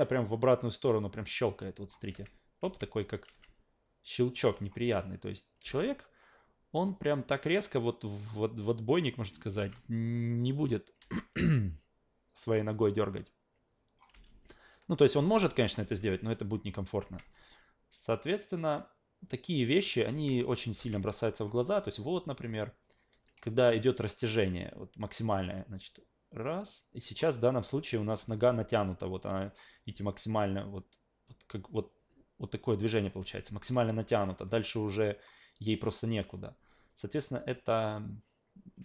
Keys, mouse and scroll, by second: 0.1 click, 2.1 alt+v, 2.6 alt+v, 3.0 click, 3.3 alt+v, 4.6 click, 5.6 alt+v, 6.2-9.5 drag, 9.6 alt+v, 11.0 alt+v, 11.8-14.0 drag, 14.1 alt+v, 15.1 alt+v, 15.6 click, 15.8 alt+v, 17.0 alt+v, 17.3-19.9 drag, 20.1 alt+v, 20.7 alt+v, 21.1-21.4 drag, 21.7-22.4 alt+drag, 22.8 alt+click, 23.6-27.2 drag, 28.1 click, 28.2 w, 28.8 click, 29.7 ctrl+z, 30.1 click, 33.2 ctrl+z, 35.8 click, 36.9-38.8 drag.